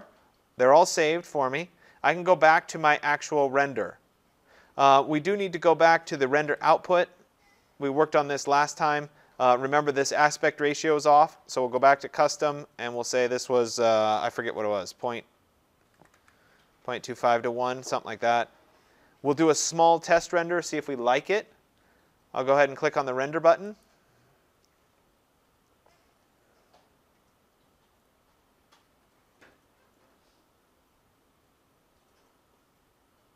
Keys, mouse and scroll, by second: 6.7-8.0 drag, 10.4 click, 11.9 click, 13.4 click, 14.3 typing, 15.5-16.2 typing, 17.5 click, 23.9 click.